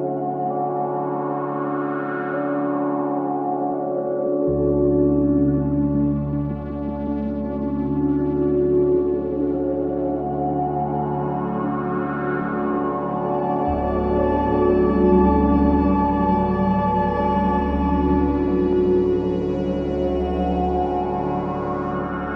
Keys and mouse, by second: 0.0 click, 0.9 click, 2.9 click, 4.3 click, 5.3 click, 5.9 alt+click, 6.8 click, 7.0-8.4 drag, 9.6-10.2 right drag, 10.2 click, 12.6 click, 13.2 click, 13.9 click, 16.8-17.9 drag, 17.9 ctrl+s, 18.3 ctrl+alt+click, 19.8 alt+shift+click, 20.7 ctrl+alt+click, 21.7 click.